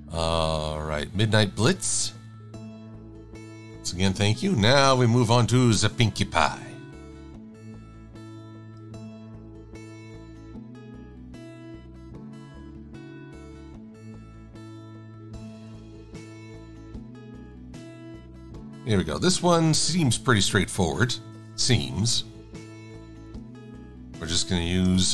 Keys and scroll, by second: 16.1 super+=, 16.5 super+=, 23.1 i, 24.9 l.